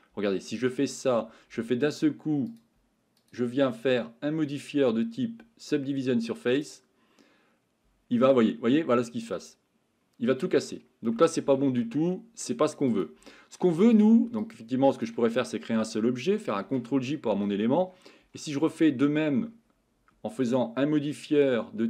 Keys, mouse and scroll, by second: 0.5-1.0 middle drag, 3.3-7.5 drag, 8.2-10.6 middle drag, 12.1 ctrl+z, 12.1 middle click, 12.9 click, 15.0 shift+click, 17.1 ctrl+s, 17.1 middle click, 20.5-21.8 drag.